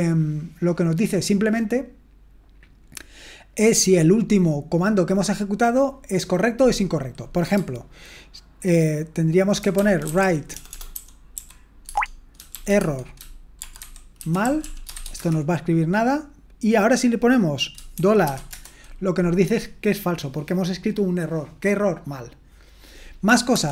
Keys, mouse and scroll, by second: 9.5-11.3 typing, 11.8 Tab, 12.5-15.4 typing, 17.9-18.2 typing, 18.5 Return, 23.3-23.7 typing.